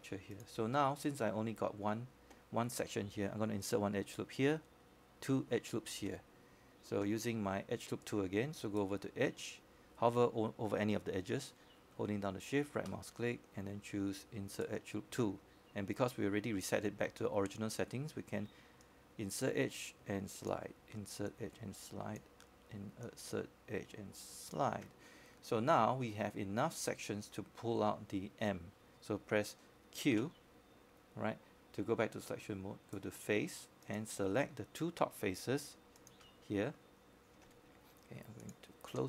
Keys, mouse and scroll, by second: 7.7-8.1 scroll down 1, 8.1 click, 8.6-9.0 scroll up 1, 9.0-14.9 scroll down 1, 15.9 right click, 20.4 shift+right click, 26.9-32.7 drag, 38.4 q.